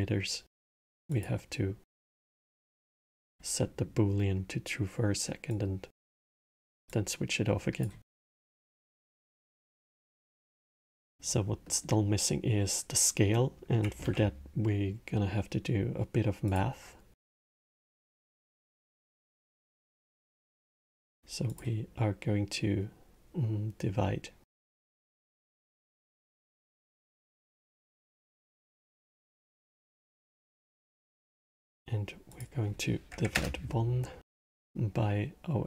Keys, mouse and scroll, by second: 0.8 click, 1.7-3.3 drag, 3.3-5.2 middle drag, 5.2-6.8 drag, 7.9-13.7 middle drag, 13.7 shift+a, 17.3 middle click, 18.0-24.4 drag, 25.6-28.6 middle drag, 32.0-35.2 drag.